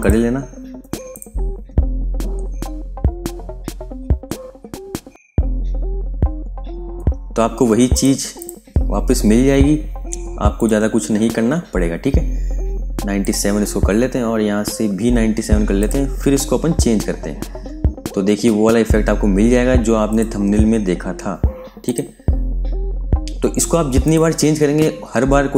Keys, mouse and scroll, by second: 1.3 scroll down 1, 3.4-7.8 scroll up 1, 7.8 click, 8.5-8.9 scroll up 1, 8.9-10.5 scroll down 1, 10.5 click, 10.7 scroll down 1, 11.2-13.1 scroll up 1, 13.1 click, 13.4 scroll up 1, 15.7 click, 15.9 scroll down 1, 16.4-18.2 scroll up 1, 18.6 scroll down 1, 20.0 click, 20.4 scroll down 1, 21.7 click, 22.0 scroll down 1, 23.9 click, 24.4 scroll up 1, 25.1 scroll down 1.